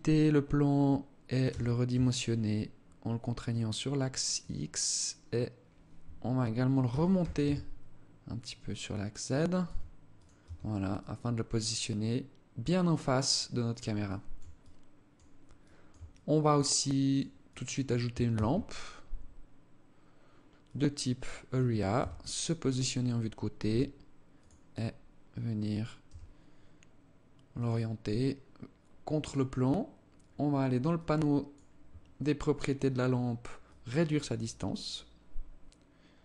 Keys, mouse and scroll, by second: 1.0 s, 6.3 g, 9.0 s, 9.8 Tab, 10.4 alt+click, 13.5 alt+shift+click, 14.0 alt+click, 15.0 alt+shift+click, 15.6 alt+click, 16.2 alt+click, 17.0 alt+click, 17.8 shift+a, 21.3 KP_3, 23.0 g, 25.4 r, 28.6 click, 30.4 click, 33.0 click.